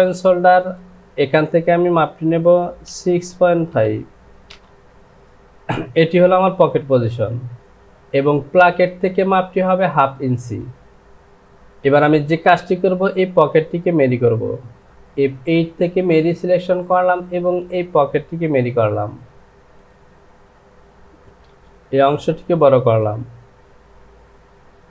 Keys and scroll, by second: 3.0 KP_6, 3.3 KP_6, 3.7 KP_Decimal, 4.5 Return, 12.0 j.